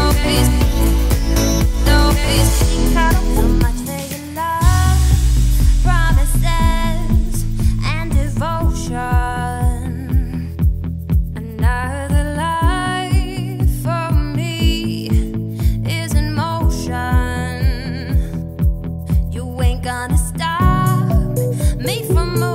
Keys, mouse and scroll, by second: 2.6-2.9 scroll down 4, 2.9-4.5 middle drag, 4.5-5.5 scroll up 4, 6.6 click, 6.9-7.8 middle drag, 7.8-8.4 scroll up 2, 8.4-9.2 middle drag, 9.2-9.7 scroll down 3, 9.7-13.7 middle drag, 13.7-14.1 scroll up 3, 14.1-17.5 shift+middle drag, 17.5-18.0 scroll down 5, 18.0-20.0 middle drag, 20.0-20.7 scroll up 2, 20.7-22.5 scroll up 2.